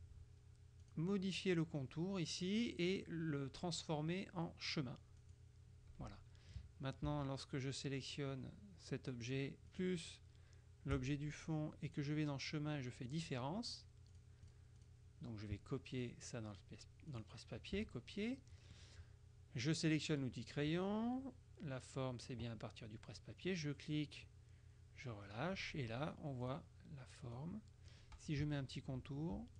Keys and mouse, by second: 1.0 click, 5.3 click, 9.8 shift+click, 12.0 click, 13.1 click, 14.2-15.4 drag, 16.0 click, 17.2 click, 17.8 KP_Subtract, 18.4 click, 20.2 click, 23.5 click, 26.5 click, 27.4 click.